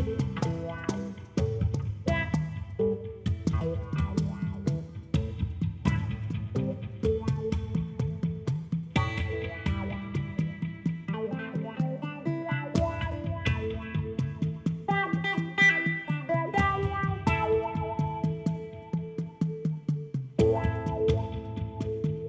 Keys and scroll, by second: 5.2-6.5 typing, 7.9 p, 8.1 o, 8.4 l, 9.1 Return.